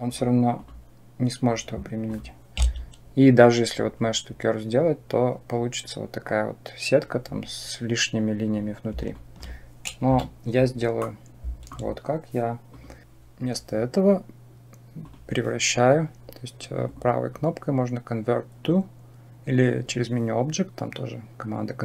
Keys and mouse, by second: 1.9 click, 9.0 alt+click, 9.9 Delete, 10.9-11.5 middle drag, 12.6 click, 15.0 click, 16.8-21.8 drag.